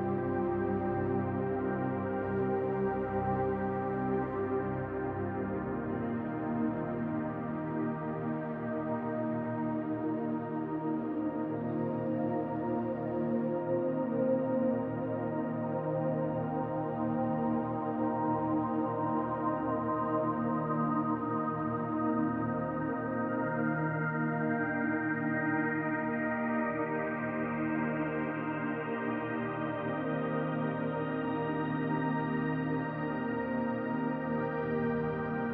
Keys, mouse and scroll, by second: 0.6-1.0 scroll up 2, 1.0 shift+middle click, 1.7 middle click, 4.9 click, 14.2 middle click, 16.3-17.1 scroll down 2, 16.6 middle click, 18.9 middle click, 21.5-22.2 scroll down 2, 21.9 middle click, 23.9 click, 25.5 click, 26.8-27.3 scroll up 1, 27.3-28.1 scroll up 2, 28.1 click, 28.1-28.7 scroll up 1, 31.3 click.